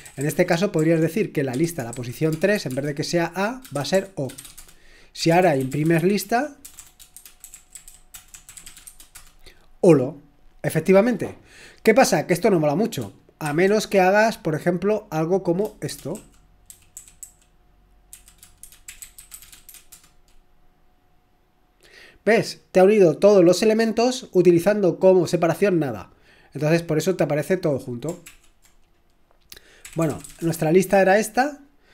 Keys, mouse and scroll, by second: 0.0-2.7 typing, 3.7-9.1 typing, 4.6 Return, 18.1-20.2 typing, 28.3 ctrl+l, 29.6-30.8 typing.